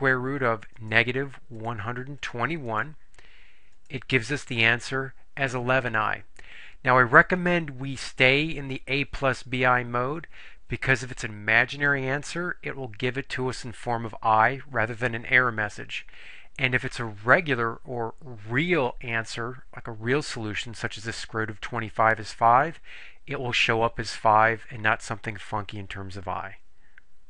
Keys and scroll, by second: 1.7 1, 2.3 2, 2.8 1, 3.9 Return.